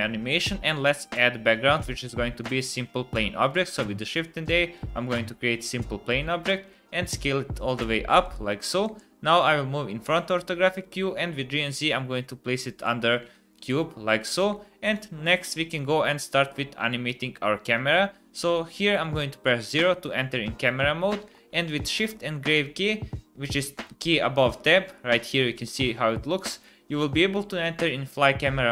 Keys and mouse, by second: 1.9 shift+a, 6.6 s, 8.8 KP_1, 11.0 g, 14.5-14.9 drag, 14.9 middle click, 15.8-16.3 middle drag, 17.1-18.2 middle drag, 19.6 KP_0, 21.8 shift+`, 25.7 shift+`, 27.0 shift+`.